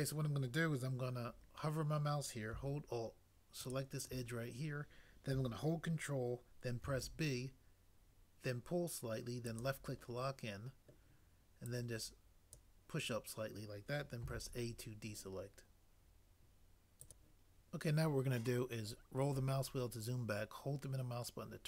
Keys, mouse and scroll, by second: 6.9 ctrl+b, 14.2 a.